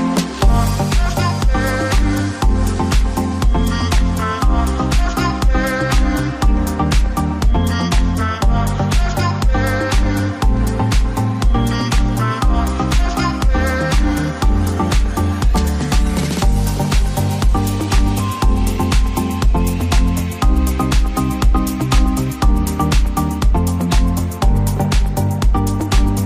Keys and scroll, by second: 0.3 BackSpace, 1.2 BackSpace.